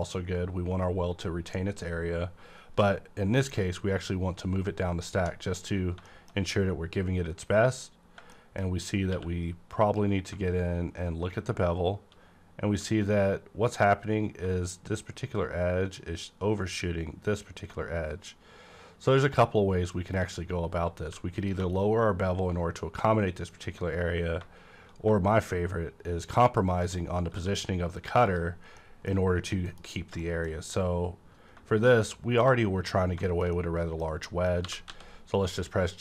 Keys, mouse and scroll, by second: 0.1-4.8 drag, 4.4-4.8 scroll up 1, 6.0 middle click, 6.4 scroll up 1, 8.0 scroll down 1, 8.3 shift+middle click, 9.0 scroll up 1, 9.1 q, 9.7 click, 19.9 shift+click, 20.5-20.9 scroll down 1, 20.9 scroll up 1, 21.0 q, 21.4 click, 27.2 scroll down 1, 27.3 q, 28.0 click, 28.3 click, 28.5 scroll down 1, 28.8 middle click, 29.4 scroll down 1, 29.7 KP_Decimal, 30.8 middle click, 31.0 middle click, 31.0 scroll up 1, 31.1 KP_Decimal, 31.7 middle click, 32.8 shift+middle click, 32.9-33.2 shift+scroll down 1, 33.2 shift+middle click, 33.8 middle click, 33.8 shift+scroll down 1, 34.3 middle click, 34.6 g, 34.9 x.